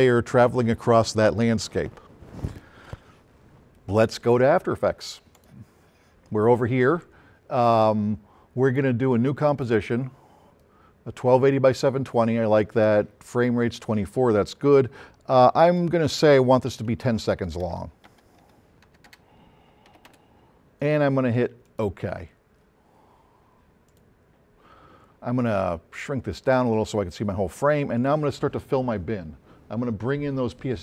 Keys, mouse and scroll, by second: 5.4 click, 8.7 click, 9.5 click, 15.7 click, 17.4 Left, 18.7 Right, 18.9 BackSpace, 19.9 KP_1, 20.1 KP_0, 21.7 click, 23.9 click, 25.5 middle click, 25.9 middle click, 26.4 middle click.